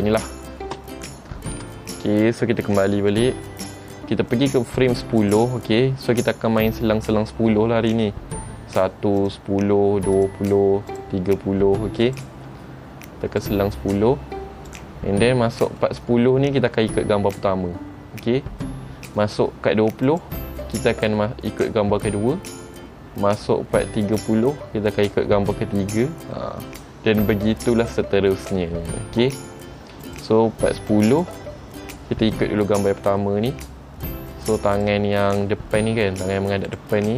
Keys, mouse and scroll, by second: 0.8 space, 3.3 click, 5.4 click, 6.9 click, 9.4 click, 10.3 click, 11.1 click, 12.2 click, 13.6 click, 14.8 click, 15.5-16.0 scroll up 3, 16.0 shift+middle click, 16.5-17.8 scroll up 1, 20.2 click, 24.3 click, 30.2 click, 31.3 click, 34.9 click, 36.8 click.